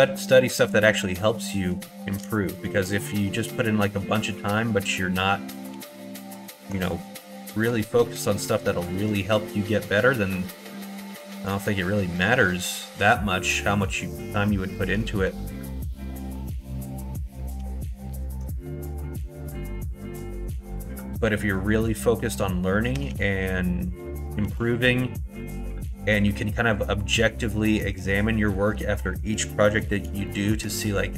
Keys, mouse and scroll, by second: 1.4 middle click, 2.4 middle click, 2.9 shift+middle click, 3.9 middle click, 4.2 shift+middle click, 4.9 middle click, 5.7 2, 6.3 click, 6.9 middle click, 8.9 ctrl+b, 13.6 middle click, 14.6 middle click, 15.1 shift+middle click, 16.0 middle click, 16.7 middle click, 17.5 2, 18.2 click, 19.2 click, 19.5 middle click, 20.0 middle click, 20.5 middle click, 21.5 middle click, 22.9 g, 24.4 ctrl+z, 25.3 g, 28.2 middle click, 29.6 scroll up 1, 29.8 middle click, 29.9 scroll down 1, 30.2 shift+middle click.